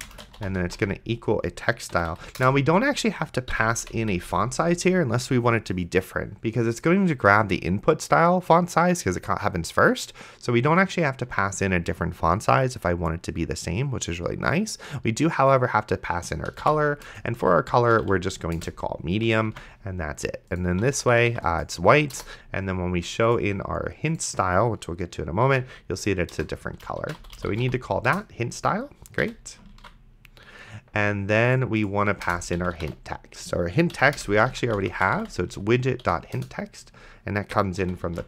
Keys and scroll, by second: 0.0-1.3 typing, 2.0 Down, 2.4 Return, 3.5 End, 3.8 ;, 4.1 Left, 16.7 o, 17.1 Return, 17.7-18.6 typing, 18.6 Return, 19.8 ctrl+s, 20.8 d, 22.2 BackSpace, 25.5 h, 26.3 BackSpace, 27.2 p, 27.7 e, 28.1 Return, 29.2 ,, 30.0 ctrl+s, 32.3 Return, 32.3-36.5 typing, 34.0 Down, 34.2 Return, 37.8 ,.